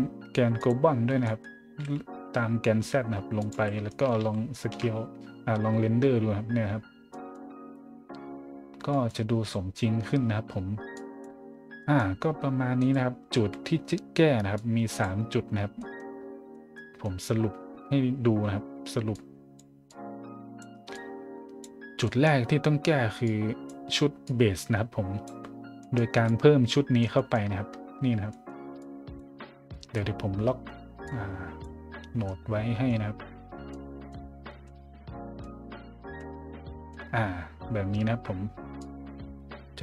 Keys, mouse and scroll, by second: 0.6 click, 1.2 scroll up 1, 1.4-2.2 typing, 3.4 click, 3.5 a, 3.9 scroll up 1, 4.2 shift+z, 4.5 shift+middle drag, 5.1 middle click, 5.7 middle click, 6.7 middle click, 7.1 middle drag, 7.8 middle click, 8.9 middle drag, 10.9 click, 11.5 scroll down 1, 11.8 middle drag, 12.7 right click, 13.4 a, 14.5 click, 15.2-15.6 scroll down 2, 15.8 middle click, 16.1 scroll down 1, 16.5 middle click, 17.2 middle click, 19.1-19.6 drag, 19.8-20.6 drag, 20.9-21.6 drag, 22.0 middle click, 22.4-23.0 middle drag, 23.2 click, 24.2-25.2 drag, 25.8 middle click, 26.3-27.0 drag, 27.1 middle click, 27.7-28.2 scroll down 1, 28.3 middle click, 28.8-29.1 drag, 29.3 scroll down 1, 29.7 middle click, 31.0 click, 31.9-32.2 scroll down 2, 32.3 middle click, 33.1-33.7 scroll up 2, 33.7-34.1 middle drag, 34.3 middle click, 34.7 middle click, 36.2-36.9 middle drag, 38.8-39.8 drag.